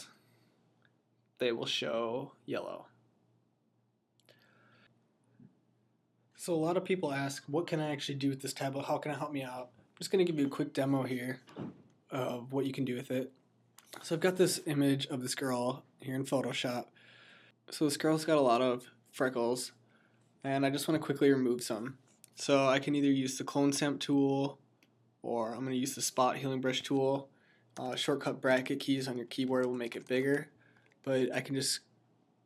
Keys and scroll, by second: 27.6-31.0 typing.